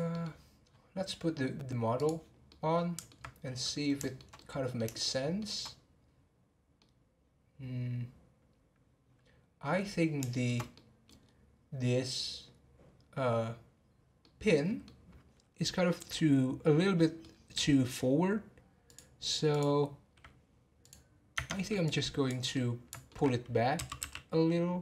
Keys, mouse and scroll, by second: 0.1-0.6 middle drag, 0.9 scroll down 9, 2.0 click, 2.5-3.4 middle drag, 3.4-4.0 scroll up 2, 4.0-9.8 shift+middle drag, 9.9 scroll up 1, 10.3-11.2 shift+middle drag, 11.2 scroll up 2, 14.2-15.8 middle drag, 15.8-17.0 scroll down 1, 17.0-18.9 middle drag, 18.9 click, 19.5 click, 20.8 click, 21.3 Tab, 22.5-23.7 middle drag, 23.7 g.